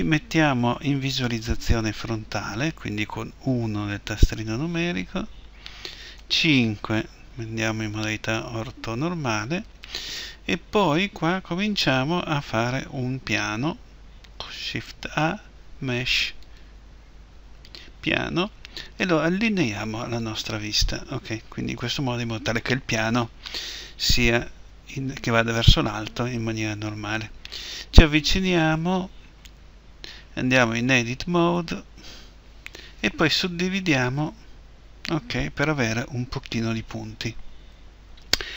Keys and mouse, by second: 3.3 KP_1, 6.2 KP_5, 14.4 shift+a, 20.2-23.3 drag, 30.6 Tab, 33.0 w.